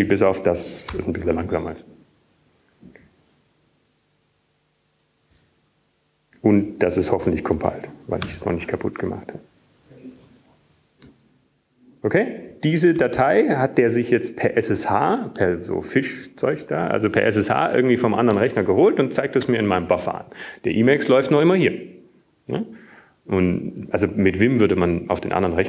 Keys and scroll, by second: 0.0-1.2 typing, 2.4 typing, 3.5 typing, 4.6 typing, 7.2 typing, 9.3-11.1 typing, 12.3 typing.